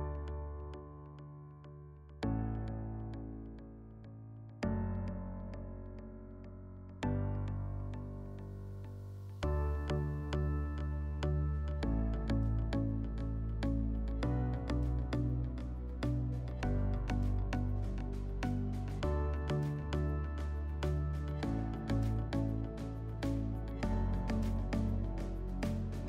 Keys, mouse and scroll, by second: 8.2-9.6 drag, 17.0-17.9 drag, 22.9 middle click, 25.9 click.